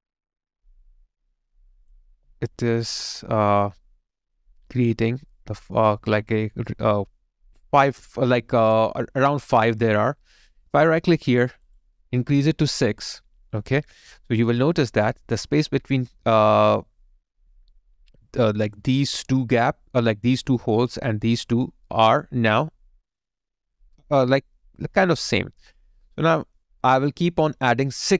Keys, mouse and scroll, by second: 2.2 alt+right click, 2.5 alt+click, 3.1 alt+right click, 10.5 right click.